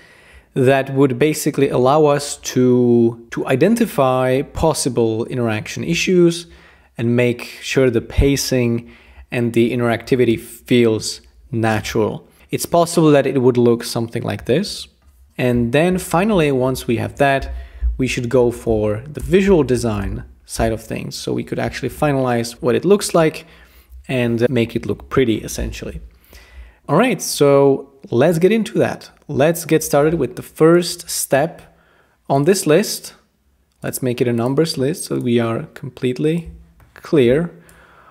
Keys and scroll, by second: 16.3 Return, 17.8-20.5 typing.